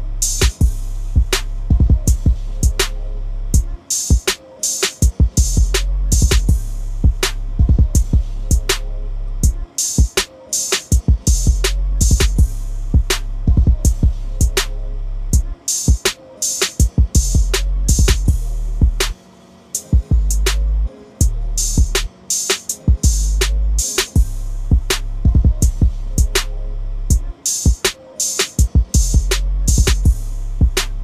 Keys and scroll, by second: 15.3 ctrl+a, 16.5 ctrl+c, 18.1 ctrl+n, 22.7 ctrl+v.